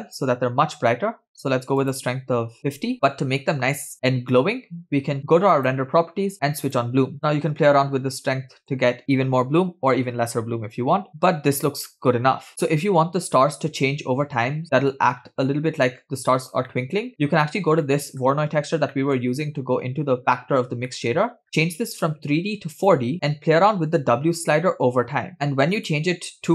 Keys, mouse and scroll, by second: 2.5 click, 5.5 click, 7.0-8.9 drag, 8.0 0, 11.1-12.5 middle drag, 15.2 scroll down 2, 16.7-17.1 shift+middle drag, 17.9-18.2 shift+middle drag, 18.9 middle click, 20.9 middle click, 21.3-21.7 scroll up 4, 22.0-23.1 drag, 25.3 shift+click.